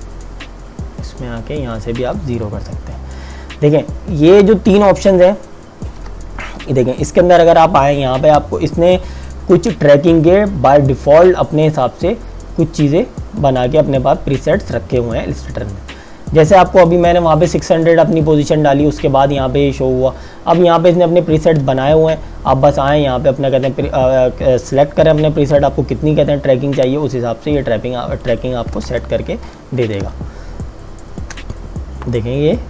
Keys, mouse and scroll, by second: 6.8 click, 28.4 click, 28.9 Return, 29.2 KP_Subtract, 30.2 click, 30.6 space, 31.4 click, 31.7 space.